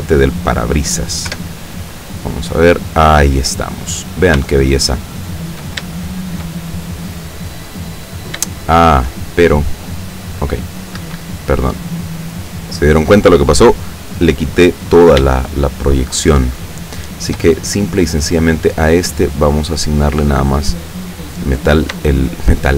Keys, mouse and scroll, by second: 1.3 F12, 4.1 scroll down 2, 4.6-5.8 shift+middle drag, 6.1 shift+middle click, 6.7-7.1 scroll up 1, 7.6 scroll down 1, 8.2 scroll down 1, 8.7 shift+middle click, 11.1 Escape, 13.2 scroll up 2, 13.7-15.3 scroll down 2, 15.3-17.5 shift+middle drag, 18.4 click, 19.8 click, 20.5 click, 22.2-22.7 shift+middle drag.